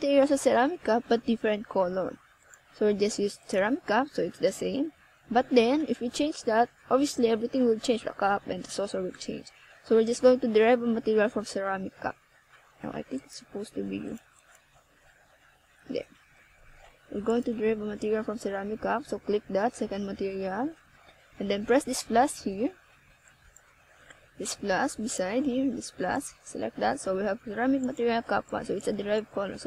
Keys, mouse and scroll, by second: 0.3-0.7 scroll down 2, 0.7 middle click, 2.6 alt+KP_0, 4.1 ctrl+alt+KP_0, 5.7 right click, 6.7 g, 9.5 middle click, 11.3 scroll up 1, 12.6 ctrl+alt+KP_0, 15.9 g, 16.9 click, 19.0 right click, 24.7 click, 28.0 click, 28.5 click, 29.3 click.